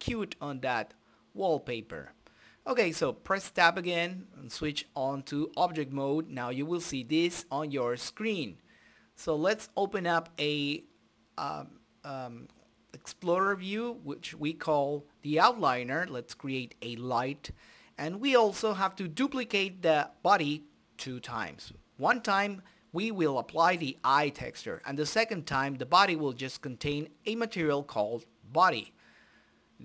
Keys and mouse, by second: 0.0 t, 2.2 Tab, 4.2-5.7 middle drag, 5.1-6.2 right drag, 6.4-9.6 middle drag, 10.9-12.2 drag, 13.1 shift+F9, 14.7 ctrl+space, 14.7 click, 15.0 g, 15.8-16.9 middle drag, 17.7 shift+z, 20.5 shift+z, 20.8-24.2 middle drag, 24.2 z, 26.4 shift+a.